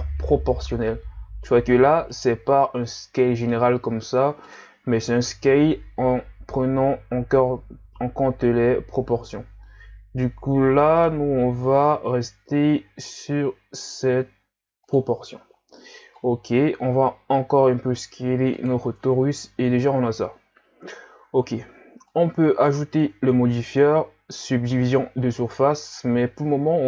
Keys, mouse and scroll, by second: 2.5-3.0 scroll down 1, 3.0 s, 5.2 alt+s, 16.2 scroll down 1, 16.5 s, 19.0 Tab, 22.1-25.1 drag.